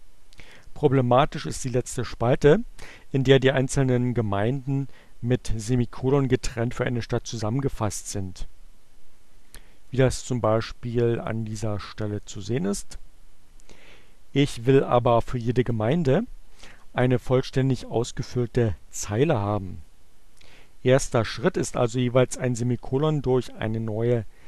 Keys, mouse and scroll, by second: 9.5-11.4 drag, 12.1 click, 22.2-24.4 drag.